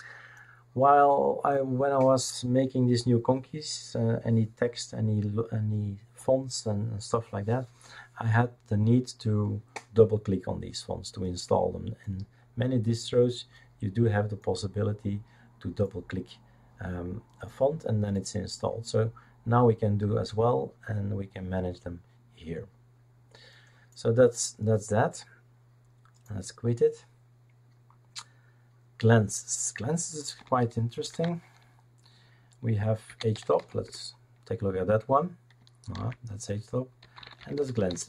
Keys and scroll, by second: 31.0 ctrl+alt+t, 32.8-34.0 typing, 35.9 ctrl+c, 36.7-38.0 typing.